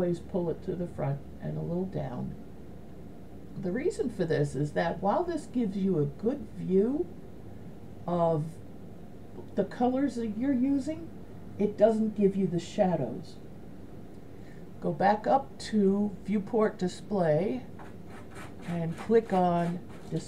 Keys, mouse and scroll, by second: 1.3 click, 4.7 middle click.